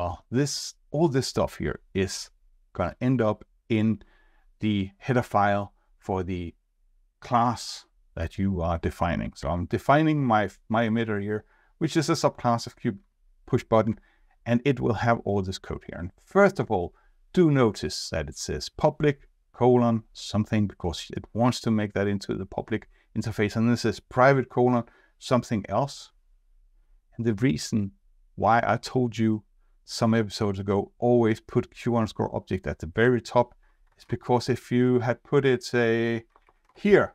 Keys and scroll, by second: 9.4 ctrl+Tab, 12.8 ctrl+Tab, 33.8 ctrl+Tab, 36.3 ctrl+shift+Down.